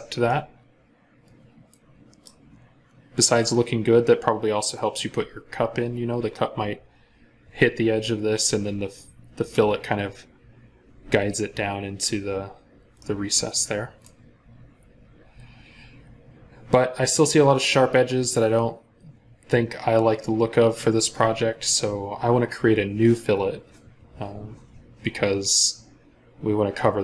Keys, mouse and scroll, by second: 0.1 middle click, 12.7 scroll up 1, 12.8 middle click, 14.1 scroll down 1.